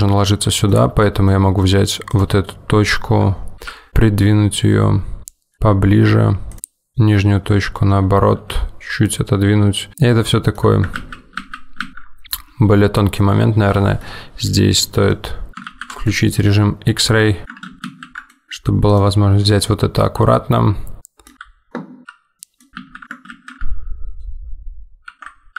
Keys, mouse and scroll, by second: 2.2 click, 3.8 g, 6.9 click, 8.6 g, 9.9 middle click, 11.0 ctrl+z, 11.4 ctrl+z, 11.8 ctrl+z, 12.3 middle click, 13.4 scroll down 2, 13.7 middle click, 14.6 middle click, 15.3 middle click, 15.8 alt+z, 16.1 middle click, 17.4-17.8 scroll up 2, 17.6 middle click, 17.8 ctrl+z, 17.9 ctrl+z, 18.4 middle click, 19.0 middle click, 19.0 click, 19.6 middle click, 21.7 middle click, 22.1 g, 22.7 middle click, 22.8 ctrl+z, 25.1 g.